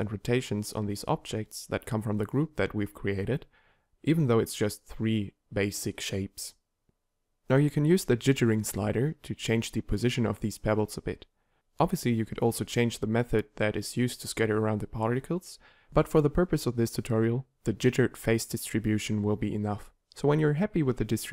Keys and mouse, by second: 12.1-13.6 middle drag, 13.9 KP_7.